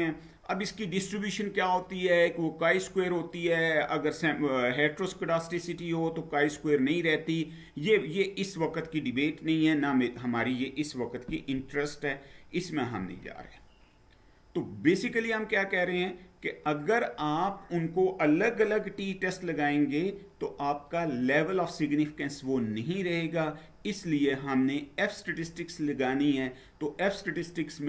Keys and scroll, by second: 12.9 Down.